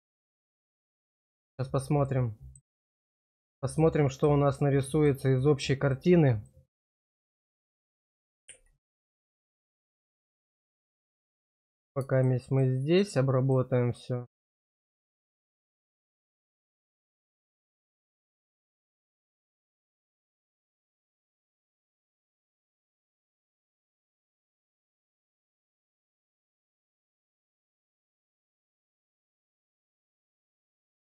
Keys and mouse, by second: 0.6 middle click, 2.1 middle click, 3.6 shift+click, 4.9 shift+click, 5.7 shift+click, 6.5 middle click, 9.7 shift+middle click, 11.6 click, 12.4 shift+click, 13.4 shift+click, 13.8 shift+click, 14.4 middle click, 15.7 shift+click, 18.8-21.2 drag, 21.6 shift+click, 22.7 click, 23.7 shift+middle click, 24.3 middle click, 26.5 middle click, 27.4 click, 27.8 shift+click, 28.3 shift+click, 28.6 shift+click, 29.1 middle click, 30.9 shift+click.